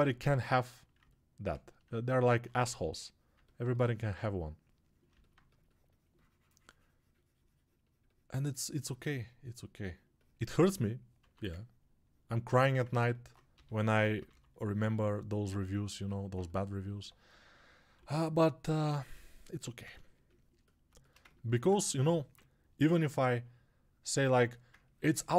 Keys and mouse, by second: 0.8-25.3 alt+drag.